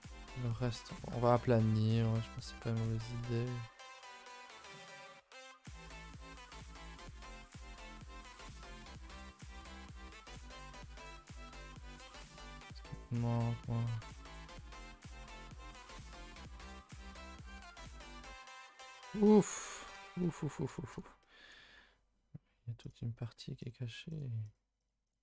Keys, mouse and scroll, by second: 0.9 click, 1.0 g, 1.8 click, 2.4 click, 2.5 g, 3.4 click, 3.5 g, 4.1 click, 4.1 g, 5.0 click, 5.2 g, 6.4 middle click, 7.2 g, 7.8-8.3 scroll up 2, 8.3 scroll down 2, 8.6 g, 10.3 click, 12.4 z, 13.1-14.3 middle drag, 14.3 z, 14.5-15.5 middle drag, 15.5 z, 15.9 click, 16.4-17.7 middle drag, 17.7 click, 18.5 z, 18.8 middle click, 19.7 scroll down 2, 20.0 shift+middle click, 20.9 scroll up 2, 21.2 middle click, 21.6 g, 23.6 click, 24.1 click, 24.8 click, 25.1 click.